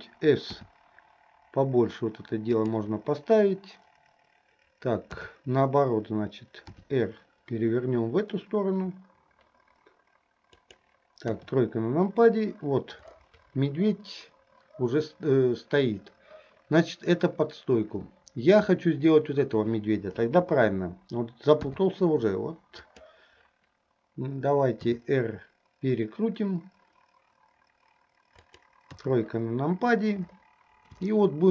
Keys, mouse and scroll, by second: 0.7 s, 5.2 KP_7, 6.8 r, 11.4 KP_3, 20.3 KP_7, 21.7 r, 24.9 r, 29.0 KP_3, 31.3-31.5 shift+middle drag.